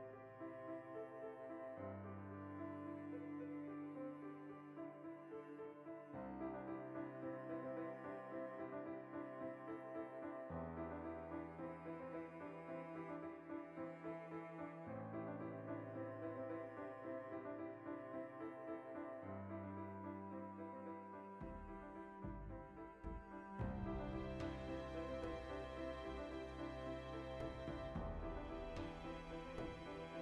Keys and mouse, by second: 0.2 click, 0.5 ctrl+b, 1.6 click, 1.7-5.0 middle drag, 2.6 Tab, 4.4 Tab, 5.0 alt+right click, 5.6 ctrl+x, 5.8-7.8 middle drag, 6.8 ctrl+r, 7.8 ctrl+r, 8.3 click, 8.4 alt+right click, 8.7 ctrl+x, 8.9-11.1 middle drag, 10.4 alt+q, 11.1 ctrl+r, 11.3 right click, 11.4-12.7 ctrl+shift+middle drag, 12.7 3, 12.8 right click, 13.3 shift+middle click, 13.7 shift+right click, 14.7-16.7 shift+middle drag, 15.9 i, 16.7 w, 19.0-21.3 ctrl+middle drag, 19.8 ctrl+z, 21.1 shift+d, 21.3 right click, 21.4-24.1 middle drag, 22.8 w, 24.1 click, 24.4 r, 25.5-26.8 drag, 26.5 g, 26.9 s, 27.8 click, 28.1 g, 28.7 click, 30.1 click, 30.1 s.